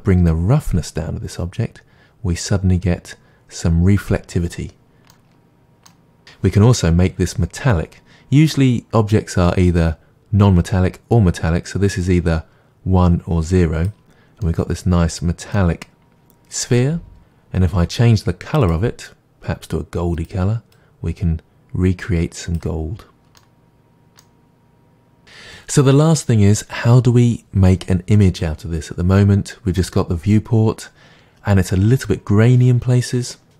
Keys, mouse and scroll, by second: 1.2-5.1 drag, 5.1-6.8 middle drag, 12.2-14.4 drag, 14.4-20.1 middle drag, 20.1 click, 20.4 middle click, 23.4-25.2 middle drag, 25.2 click, 29.2-33.5 middle drag.